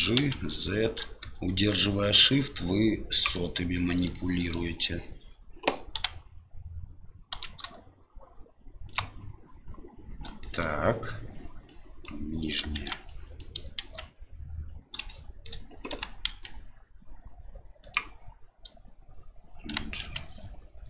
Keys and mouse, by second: 4.2 shift+middle click, 5.9 g, 10.4 shift+middle click, 11.8 click, 12.7 shift+z, 13.0 click, 13.8 shift+z, 15.0 shift+middle click, 15.9 g.